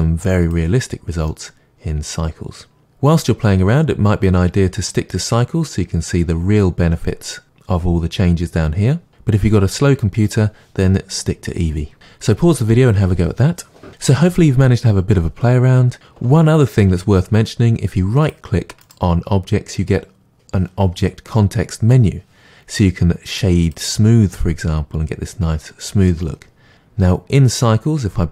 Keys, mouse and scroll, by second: 0.5-1.3 drag, 1.3-23.7 middle drag, 18.3 click, 23.7-28.3 right drag.